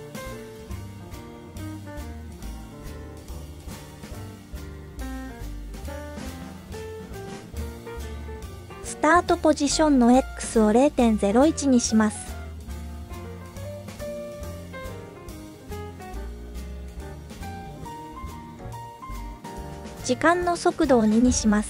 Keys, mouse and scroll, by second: 0.4-1.1 scroll down 2, 1.4-1.8 drag, 1.4 space, 6.5 click, 10.6-14.8 drag, 19.8 click, 20.5 scroll down 2.